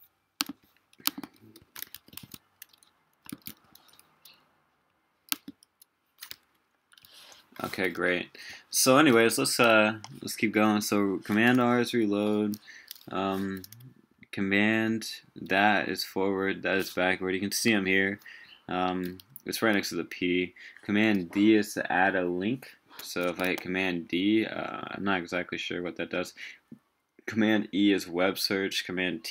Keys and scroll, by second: 1.6 super+c, 1.9 super+w, 2.2 super+Tab, 3.3 super+a, 3.5 super+v, 14.9 super+], 15.7 super+[, 23.4 super+d.